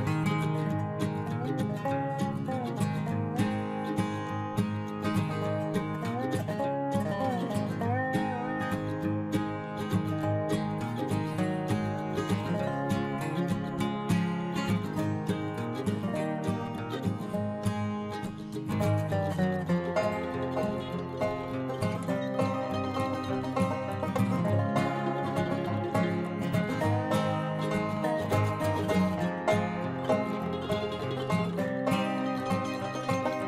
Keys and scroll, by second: 19.0 alt+Delete.